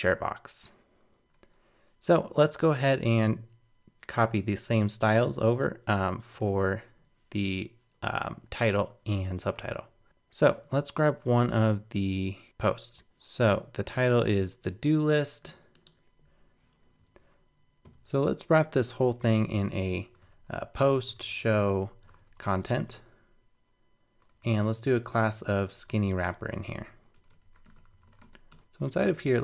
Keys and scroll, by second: 17.8 shift+super+Left, 28.5 super+BackSpace.